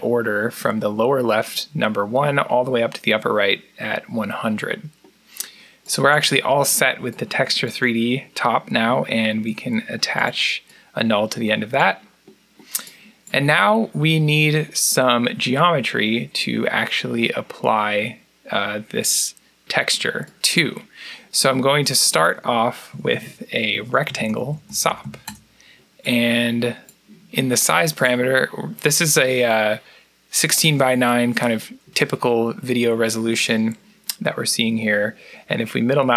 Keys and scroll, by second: 9.1 alt+n, 22.8 Tab, 23.0 Tab, 23.3-26.3 typing.